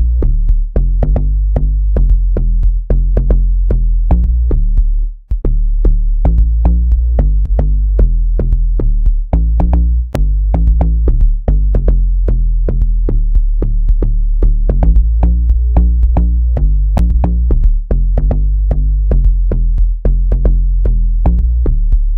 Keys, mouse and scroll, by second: 1.6-3.4 drag, 9.4 click, 14.5 click, 19.1 click.